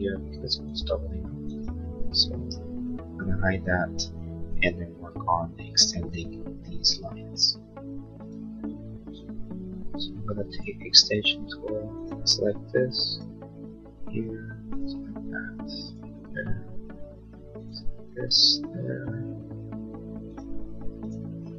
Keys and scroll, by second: 4.0 space, 5.2 ctrl+z.